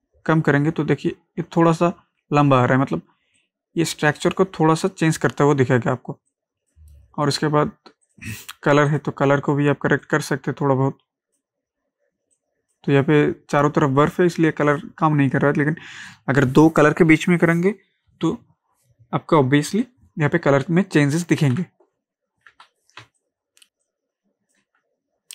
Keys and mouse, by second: 3.4-6.3 drag, 6.3-15.6 drag, 21.3 click, 21.5 ctrl+z, 23.0 ctrl+space, 23.2 ctrl+click, 23.5 ctrl+space, 23.9 ctrl+click, 24.1 ctrl+space.